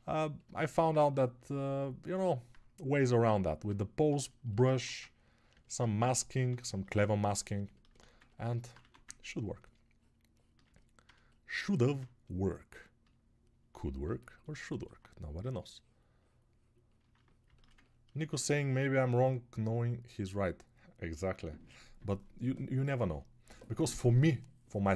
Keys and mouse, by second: 5.0 ctrl+1.